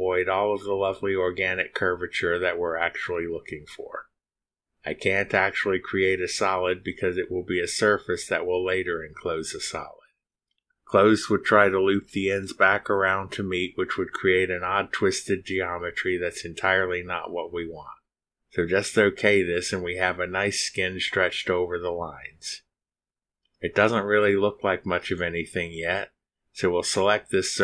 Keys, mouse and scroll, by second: 21.2 click, 23.3 middle click, 23.4-26.2 drag, 26.8 middle click, 26.9 click.